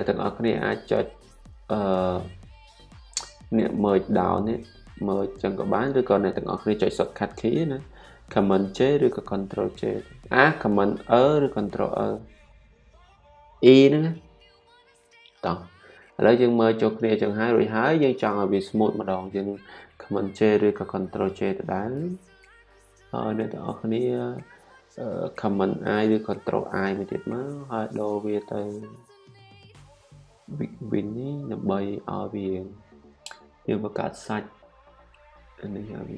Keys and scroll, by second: 5.6 super+z, 12.1 super+e, 21.5 super+j, 27.0 super+i.